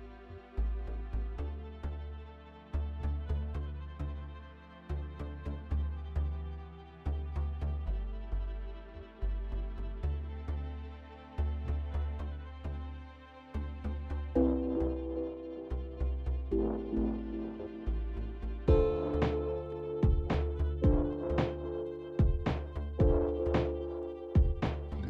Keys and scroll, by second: 13.0 z, 13.6 F3, 20.4 ctrl+z.